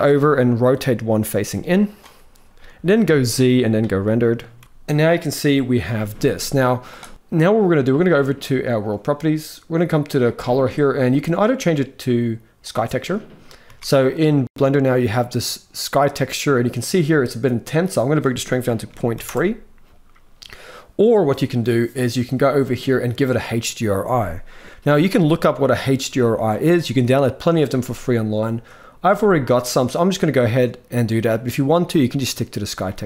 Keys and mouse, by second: 1.2 g, 2.7 z, 4.4 ctrl+s, 4.6 ctrl+s, 5.8 z, 7.1 ctrl+s, 8.6 click, 10.2-12.5 drag, 13.4 z, 17.6-18.9 drag, 28.8-32.5 drag.